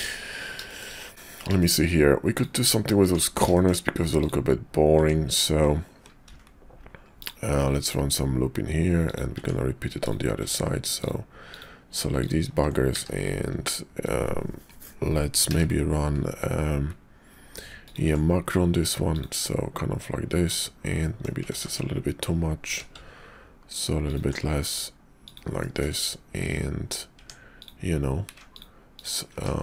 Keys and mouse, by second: 0.7 shift+click, 1.6 shift+middle click, 2.3 middle click, 3.0 Tab, 3.5 shift+click, 4.2 click, 5.0 Tab, 6.3 ctrl+r, 9.3 Tab, 10.0 click, 11.0 ctrl+click, 11.5 ctrl+click, 12.2 ctrl+click, 12.9 q, 15.5 q, 19.4-20.5 middle drag, 21.0 middle click, 21.5 ctrl+z, 22.7 q, 25.6 click, 27.2 Tab, 27.6 click, 28.5 ctrl+click, 28.9 ctrl+click, 29.4 ctrl+z.